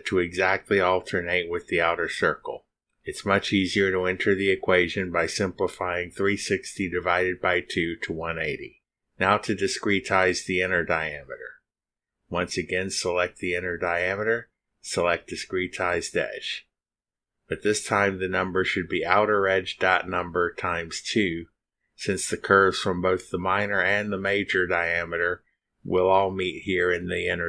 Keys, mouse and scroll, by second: 10.6 click, 12.8 click, 14.4-14.7 scroll up 2, 15.3 click, 19.4 click, 20.5 click, 22.0 shift+o, 22.9 u, 23.6 Down, 24.1-25.1 typing, 25.2 Down, 26.2 shift+8, 26.4 shift+2, 27.2 Return.